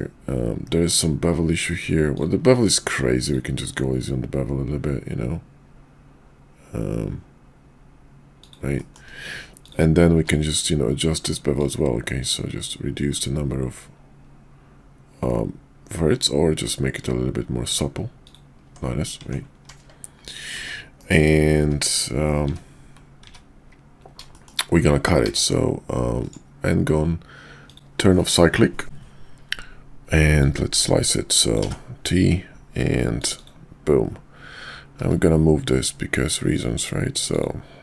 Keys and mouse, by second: 2.4 q, 8.7 shift+middle click, 9.5 click, 10.2 q, 18.6 Tab, 20.4-23.2 typing, 24.3 middle click, 25.1 d, 27.6 click, 30.4-31.6 drag, 35.0 q.